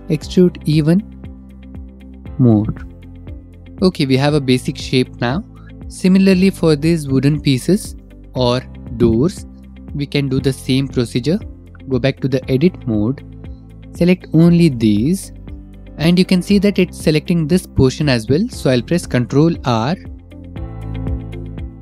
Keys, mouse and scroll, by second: 3.2 Tab, 3.4 click, 3.4 middle click, 3.7 middle click, 3.8 middle click, 4.3 middle click, 4.6-4.9 scroll, 5.4-5.9 scroll, 6.2 click, 10.9 click, 11.7 Tab, 14.8 click, 15.7 shift+middle click, 15.7-16.5 scroll, 16.6 shift+middle click, 17.5-18.3 scroll, 18.9 ctrl+r.